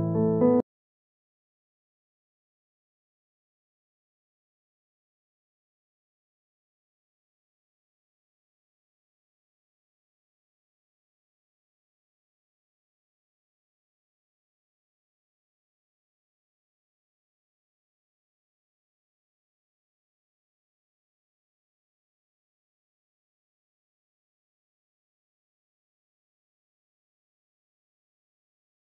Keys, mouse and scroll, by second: 0.5 right click.